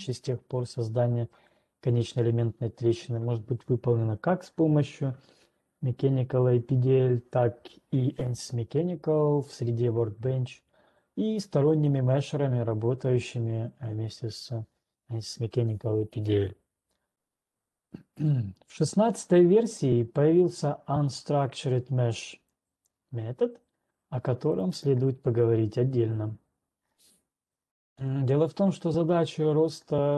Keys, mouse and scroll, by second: 19.5 click, 23.0 click, 24.5-25.0 scroll down 7, 25.0 click, 25.5 click, 26.3 click, 27.5-28.2 scroll down 9, 28.5 scroll down 1, 29.5-30.0 scroll.